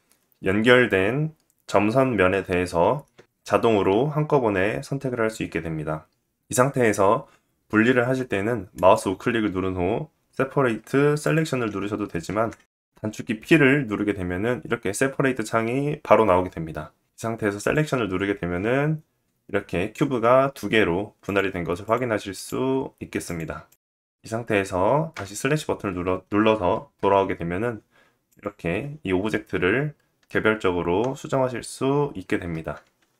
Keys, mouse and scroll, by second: 8.3-11.4 right drag, 11.6 ctrl+z, 12.7 p, 20.1 Tab, 20.8 click, 21.4 click, 21.9 click, 22.8 click, 23.2 click, 23.6 click, 24.7 /, 26.5 KP_1, 27.8 click, 32.8 middle click.